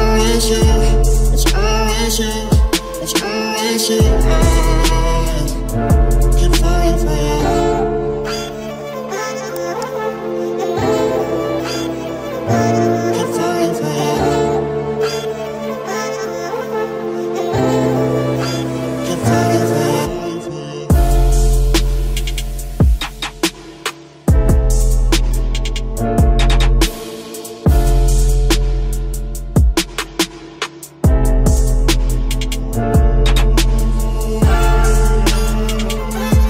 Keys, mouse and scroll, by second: 0.8 ctrl+Tab, 3.2-4.6 drag, 4.7-7.4 middle drag, 7.8 a, 8.9 k, 18.3 ctrl+Tab, 19.8 c, 25.2 i, 26.0 z, 26.5 click, 27.4-28.8 drag, 28.8 ctrl+b, 29.8 Tab, 30.2 ctrl+s, 30.9 KP_3, 31.1 z, 33.0 Tab, 34.3 ctrl+Tab, 35.3-36.4 middle drag.